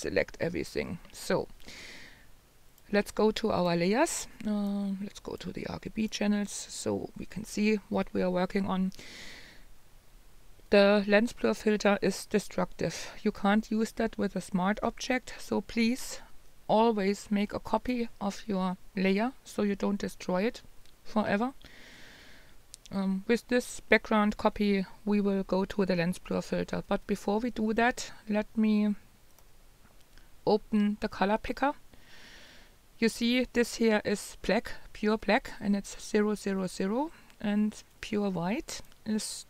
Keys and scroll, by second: 2.6-3.3 typing.